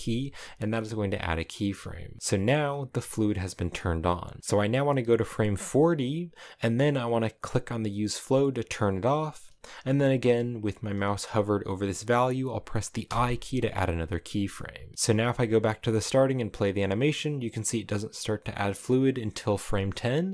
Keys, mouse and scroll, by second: 3.9-8.6 drag, 12.7 i, 14.4-15.5 drag, 15.5 space, 18.9-20.3 drag.